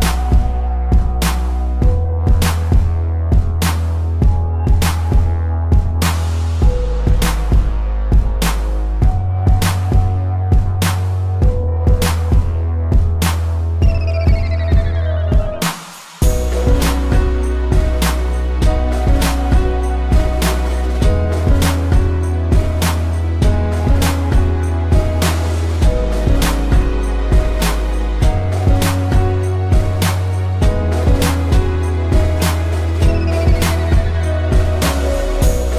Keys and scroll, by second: 6.9 shift+t, 7.1 e, 7.2 k, 7.3 s, 8.1 Return, 9.6 space, 15.4 p, 16.1 ctrl+=, 16.7 space, 17.7 ctrl+=, 18.4 space, 25.9 ctrl+=, 27.3 ctrl+z, 35.4 space.